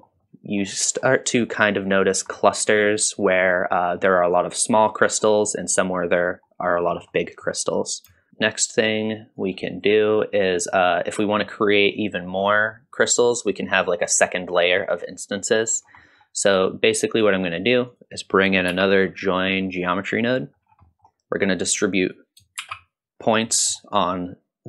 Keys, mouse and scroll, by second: 0.0 scroll down 1, 0.2-0.6 middle drag, 0.2 scroll up 1, 1.0-1.5 middle drag, 2.3-2.8 middle drag, 3.2 middle drag, 4.0 middle click, 4.9 scroll up 1, 4.9-5.2 middle drag, 6.9-7.3 scroll up 1, 7.3 middle drag, 8.2 shift+click, 8.3 middle click, 8.3 scroll down 2, 8.4 click, 9.4-9.9 drag, 10.2 click, 11.2 scroll up 1, 11.4 middle drag, 12.5 middle drag, 13.1 middle drag, 15.0-15.6 drag, 15.8 scroll down 1, 16.0 middle click, 16.7-17.3 drag, 17.9 click, 18.7 shift+d, 20.2 middle click, 20.9 middle drag, 20.9 scroll down 1, 22.0 click, 22.8 shift+d, 23.5 middle click.